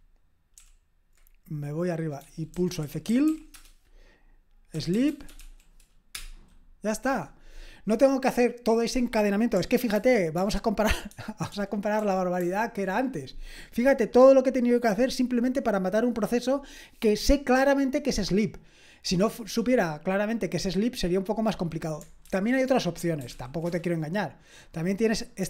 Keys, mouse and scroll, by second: 0.5 super+k, 2.3-5.8 typing, 6.1 Return, 9.9 ctrl+p, 10.4 ctrl+p, 11.1 ctrl+p, 11.5 ctrl+p, 22.2 super+j, 23.3 ctrl+p, 23.6 Return.